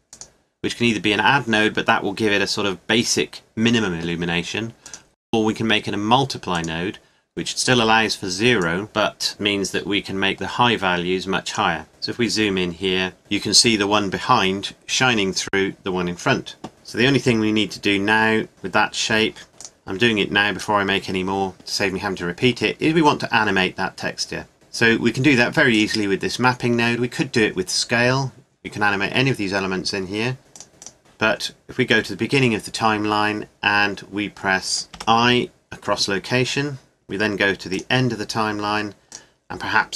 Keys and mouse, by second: 2.1-4.5 middle drag, 5.2 click, 5.7-6.8 middle drag, 8.6 middle click, 10.0 middle click, 11.4-12.6 middle drag, 12.9 middle click, 13.7 middle click, 16.7 KP_0, 18.5 click, 19.5 Delete, 20.6-25.7 drag, 25.7-27.4 right drag, 27.5-29.3 middle drag, 29.3-30.4 right drag, 30.4 middle click, 30.6 click, 34.9 |, 37.7-39.9 drag.